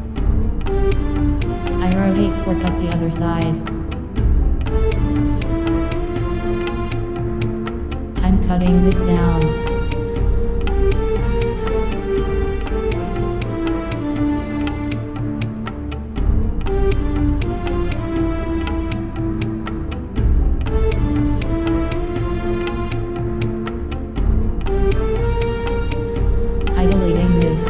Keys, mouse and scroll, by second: 0.4 Return, 4.6 KP_1, 5.6-7.2 right drag, 7.2 Tab, 8.9 click, 9.3 Delete, 10.9-13.7 right drag, 12.4 space, 14.8 space, 15.9 Tab, 16.2 z, 20.3-22.2 right drag, 20.9-22.5 middle drag, 22.4 click, 23.0 z, 23.4-25.2 middle drag, 24.6 right click, 26.1 Delete, 26.9-27.6 middle drag.